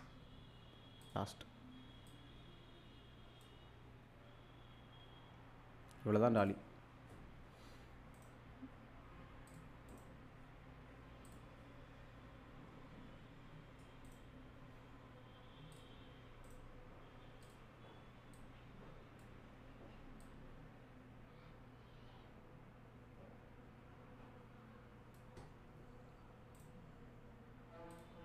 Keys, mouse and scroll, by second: 6.4 click, 8.2 right click, 9.5 click, 9.9 right click, 11.3 click, 14.1 right click, 15.7 click, 16.5 right click, 17.4-19.3 drag, 26.6 right click, 27.9 click.